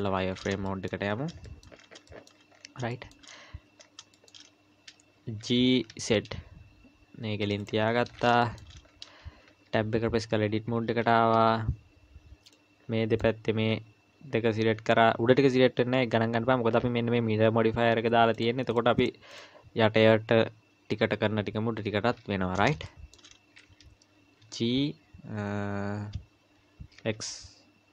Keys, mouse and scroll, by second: 0.3-0.7 scroll up 4, 0.7 shift+middle click, 1.1-2.1 scroll up 4, 1.4 shift+middle click, 2.1 shift+middle click, 2.5-2.9 scroll up 3, 2.9 shift+middle click, 3.8-5.2 scroll up 4, 4.1 shift+middle click, 5.4 g, 7.9-8.4 scroll down 9, 8.4 shift+middle click, 8.8-9.5 scroll up 1, 9.5 Tab, 9.5-10.2 scroll up 2, 10.7-11.3 scroll down 1, 12.5 click, 18.3 click, 18.7 click, 19.0 click, 19.3 click, 22.9 shift+middle click, 24.4 g.